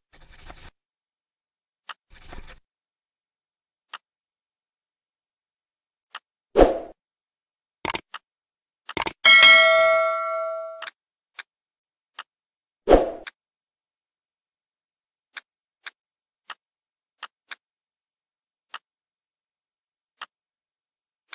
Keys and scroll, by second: 2.4 Return, 7.3 Return.